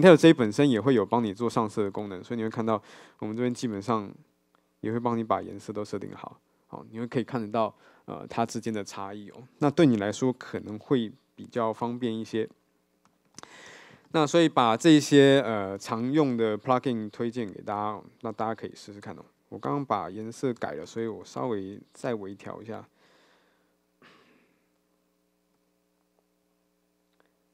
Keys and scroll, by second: 19.3 ctrl+`.